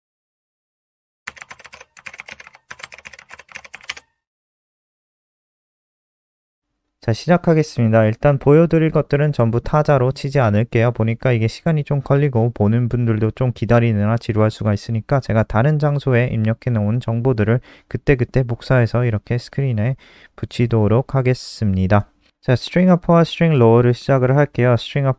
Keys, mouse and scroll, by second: 6.9 ctrl+alt+r, 11.8 click, 12.1 scroll down 2, 12.9 click, 13.9 ctrl+c, 14.5 click, 15.1 Up, 15.3 Up, 15.5 End, 15.7 Return, 16.0 Return, 16.2 Up, 16.4 Return, 18.1 Up, 20.1 ctrl+v.